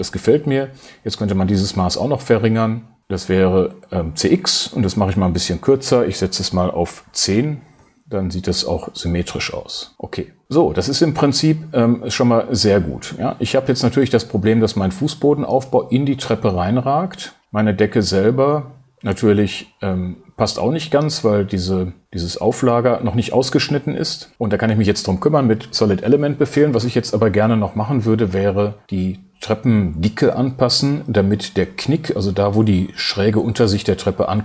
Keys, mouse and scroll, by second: 3.0 super+t, 3.2-6.9 drag, 6.9 BackSpace, 8.6-9.8 drag.